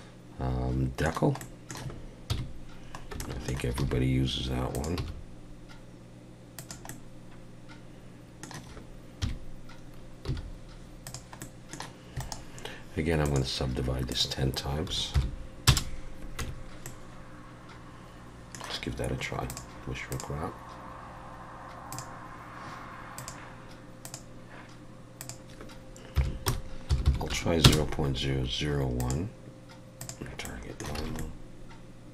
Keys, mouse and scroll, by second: 1.4 middle click, 2.3 KP_1, 2.9 scroll up 2, 3.2 shift+middle click, 3.8 r, 4.9 g, 6.9 middle click, 9.2 KP_3, 9.9-10.3 scroll down 1, 10.3 g, 11.4 middle click, 12.2 right click, 14.1 click, 16.4 Tab, 16.8 middle click, 19.5 click, 20.1 click, 23.2 click, 25.2 click, 27.0 0, 29.0 click, 30.4 middle click, 31.0 alt+a, 31.2 middle click.